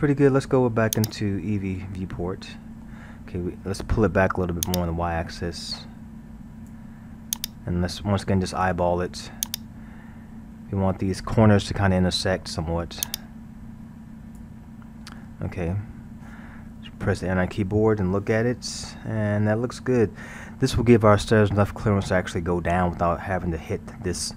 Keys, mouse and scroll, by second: 1.0 click, 1.9-4.7 middle drag, 4.7-12.5 drag, 13.0-16.0 drag, 17.5 a, 17.7 scroll, 18.2-23.7 middle drag.